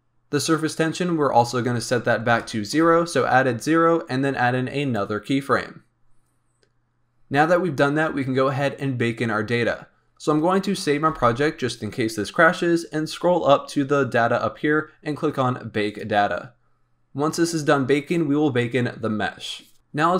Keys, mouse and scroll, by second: 1.3-4.4 drag, 4.9-7.8 drag, 8.8-11.0 scroll down 10, 11.0 ctrl+s, 12.2-15.8 scroll up 19, 15.8-20.1 drag.